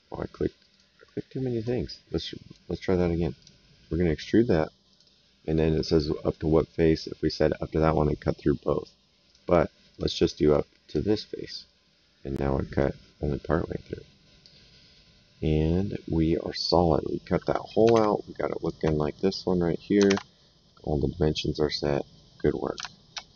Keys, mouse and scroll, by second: 0.7 click, 2.1 right click, 3.4 click, 4.9 click, 5.7 right click, 6.9 click, 9.3 click, 11.6 right click, 16.5 click, 17.2 middle click, 17.9 alt+Tab, 18.6 alt+click, 20.0 alt+Tab, 21.4 middle click.